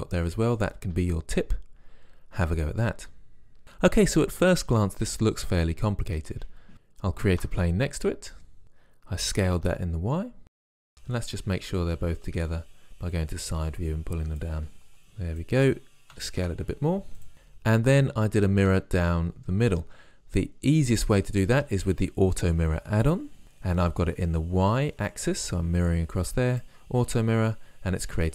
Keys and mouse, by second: 0.6 middle click, 7.4 shift+a, 9.4 s, 10.9 KP_1, 12.3 KP_5, 16.2 s.